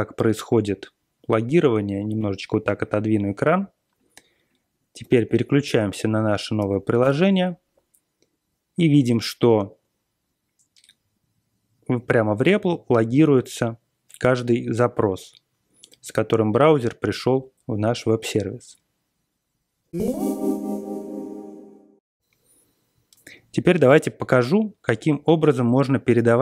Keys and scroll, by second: 5.0 BackSpace, 5.1 1, 5.8 /, 6.5 BackSpace, 7.0 Return.